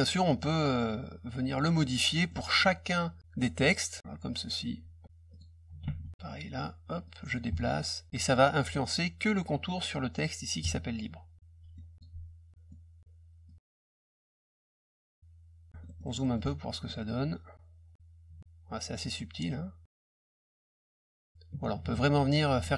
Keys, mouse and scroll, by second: 0.3 click, 2.3 middle click, 4.0-5.0 drag, 5.3 click, 5.8 ctrl+z, 7.0-8.1 drag, 8.1 middle click, 10.6 ctrl+click, 11.3 middle click, 11.9 click, 12.7 middle click, 13.4 click, 14.7 click, 15.7 middle click, 15.8 middle click, 16.0 middle click, 16.2 middle click, 16.2 scroll up 2, 16.8 middle click, 17.9-20.6 drag, 22.3 middle click.